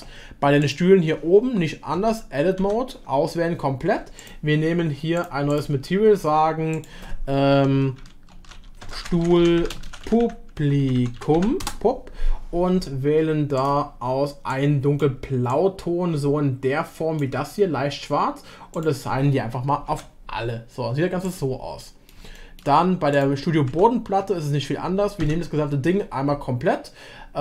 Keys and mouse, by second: 0.7-2.0 drag, 2.0 Tab, 2.6 a, 4.2-12.2 drag, 18.7 click, 19.9 Tab, 21.8 middle click, 22.3 shift+middle drag, 23.1 click, 23.7 Tab, 25.2 Tab, 26.7 a.